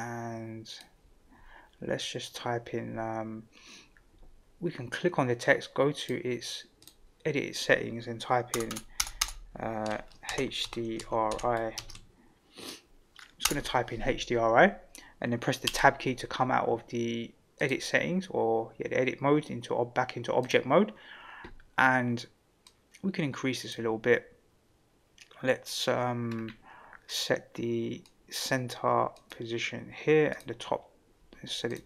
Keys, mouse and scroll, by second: 6.0-6.9 drag, 8.5 BackSpace, 8.7 BackSpace, 9.2 BackSpace, 10.2-11.7 typing, 13.4 BackSpace, 15.6 Tab, 17.6-20.5 drag, 22.6-23.7 drag, 26.3 scroll down 3, 27.1-28.4 drag, 29.1-30.4 drag, 31.7-31.8 drag.